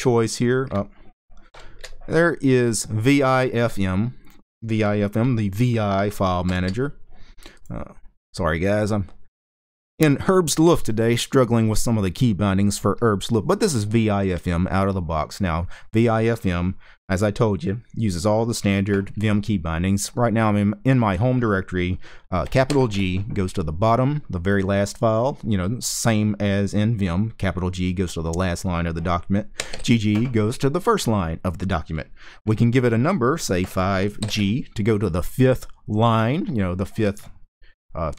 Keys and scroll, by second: 1.3 shift+super+2, 6.2 shift+super+c, 22.4 shift+g, 29.3 typing, 33.3-33.9 typing.